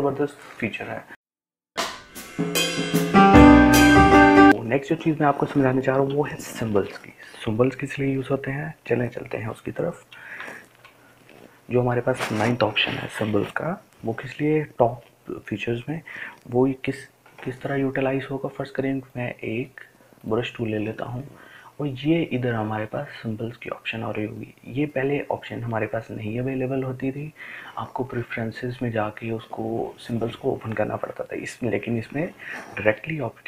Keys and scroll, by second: 6.5 Delete.